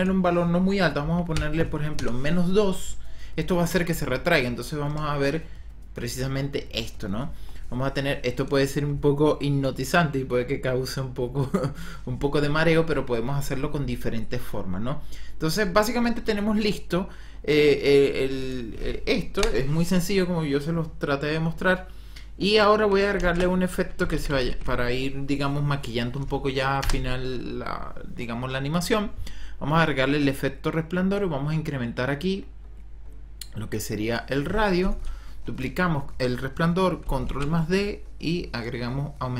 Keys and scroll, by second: 0.9 KP_Subtract, 1.2 KP_2, 1.9 Return, 4.8 KP_0, 19.3 l, 23.4 ctrl+-, 23.7-25.1 typing, 26.7 Return, 37.3 ctrl+d.